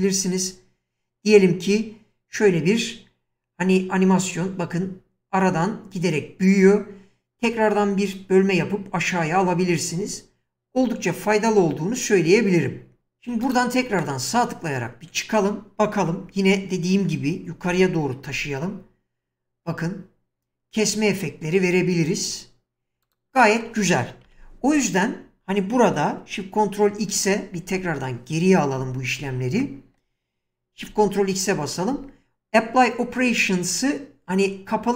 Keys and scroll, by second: 17.6 g, 24.3 1, 27.6 ctrl+x, 28.8 ctrl+z, 30.9 ctrl+shift+x.